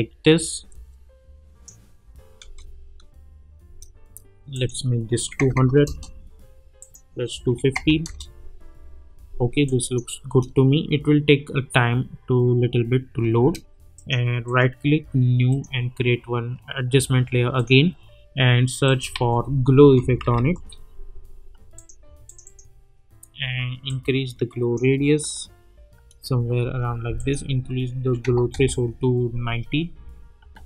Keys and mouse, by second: 2.4 space, 4.5 click, 5.8 Return, 6.8 click, 8.0 Return, 9.6 click, 10.2 space, 13.3 space, 13.9 click, 14.4 right click, 15.5 click, 19.1 ctrl+a, 19.6-20.8 typing, 21.7-24.8 drag, 26.2 space, 27.2 click, 28.5 Return, 30.5 space.